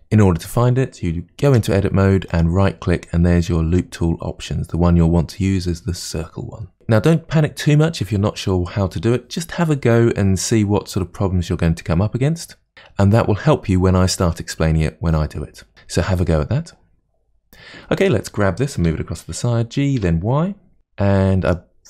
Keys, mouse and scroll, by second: 1.5 Tab, 2.3-5.3 right drag, 18.0 click, 18.9 g, 21.5 click.